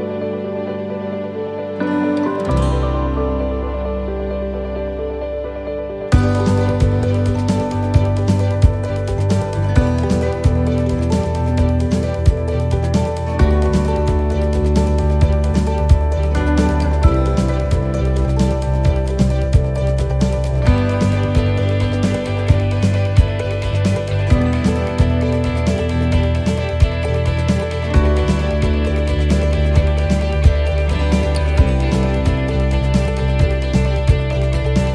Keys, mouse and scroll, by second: 1.5 click, 3.9 shift+middle click, 4.5 middle click, 5.1 shift+middle click, 5.5 scroll up 1, 6.0 shift+middle click, 7.2 click, 8.5 right click, 9.6 l, 10.5 click, 12.2 middle click, 14.2 middle click, 14.6-15.0 scroll down 1, 15.0 shift+middle click, 15.5 middle click, 16.0 shift+middle click, 16.4 scroll up 2, 16.8 middle click, 17.3 shift+middle click, 17.7 scroll up 1, 18.0 middle click, 18.5 shift+middle click, 19.7 click, 21.6 right click, 24.7 right click, 24.9 shift+right click, 25.1 middle click, 25.8-26.1 scroll down 2, 26.1 middle click, 27.3 middle click, 29.7 right click, 30.2 shift+right click, 30.5 middle click, 31.5 e, 33.3 middle click, 34.3 shift+middle click.